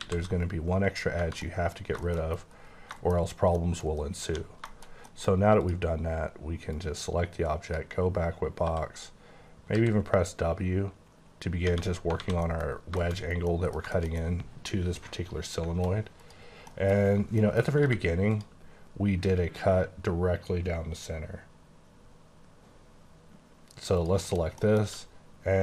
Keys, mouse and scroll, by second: 0.0 ctrl+x, 1.0 scroll down 3, 1.2 Tab, 1.4 middle click, 1.7-2.7 scroll down 11, 2.0 shift+middle click, 2.9 shift+middle click, 4.1 scroll up 2, 4.3 1, 4.6 middle click, 4.9 scroll up 2, 5.1 middle click, 5.6 click, 6.7 click, 8.6 w, 9.7 w, 12.1 alt+scroll down 1, 12.2 alt+a, 12.4 middle click, 12.6-13.5 scroll down 7, 13.0 shift+middle click, 13.5 middle click, 16.2 click, 16.7 middle click, 17.0 scroll up 1, 17.4 middle click, 17.8 q, 18.3 click, 18.6-20.6 scroll down 14, 20.6-22.0 scroll up 8, 22.0-23.6 scroll up 9, 23.6-24.0 scroll down 1, 24.0 click, 24.3 KP_Decimal, 24.6 middle click, 24.8 q.